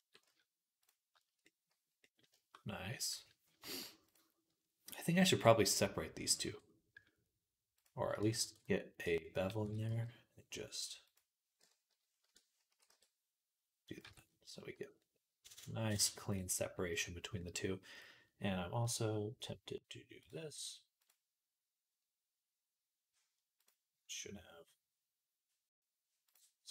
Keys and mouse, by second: 0.1 z, 3.4-9.3 shift+right drag, 6.3 Tab, 8.0-9.3 ctrl+drag, 8.3 ctrl+r, 9.5 s, 13.9 Tab, 13.9 s, 14.4-26.7 middle drag, 16.2 click.